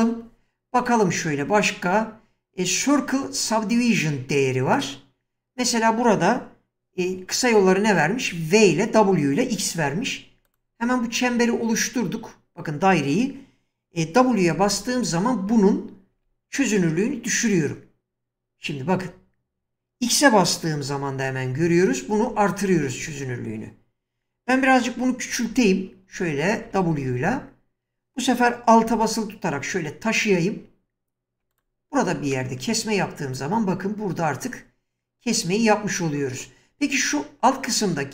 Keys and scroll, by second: 14.4-16.7 typing, 21.4-23.0 typing, 25.3-26.9 typing.